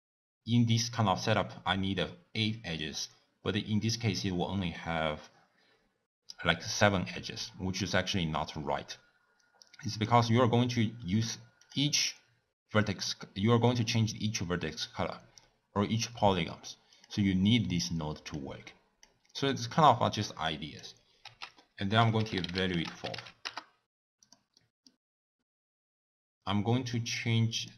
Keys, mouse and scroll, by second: 10.0 click, 11.7 click, 16.9 click, 23.6 ctrl+a.